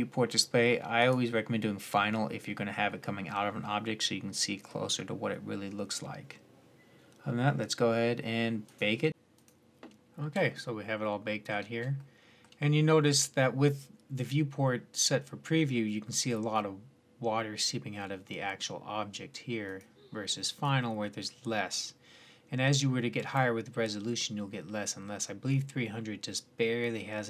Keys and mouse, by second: 8.6 click, 10.3-15.1 middle drag, 19.0-19.5 middle drag, 19.5-21.4 drag.